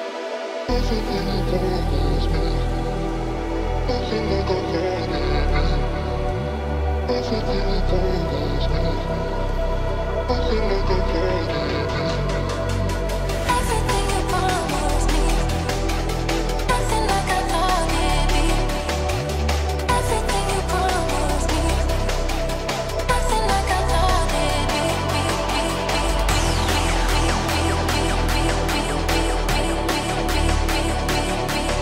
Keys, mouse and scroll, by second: 0.3 double click, 2.6 ctrl+click, 5.4 scroll down 1, 6.7 shift+click, 7.0 shift+scroll down 1, 7.8 scroll down 1, 7.9 shift+click, 8.7 F2, 9.8 double click, 12.6 shift+Page_Up, 14.1 right click, 24.7 double click.